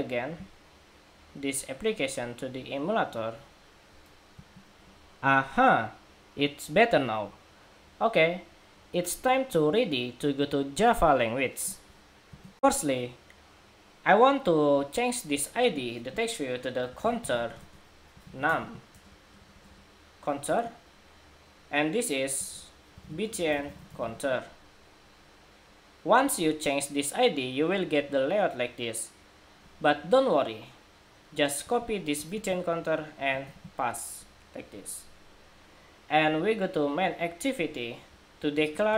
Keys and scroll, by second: 4.4 shift+super+2, 32.0 super+c, 33.3 super+v.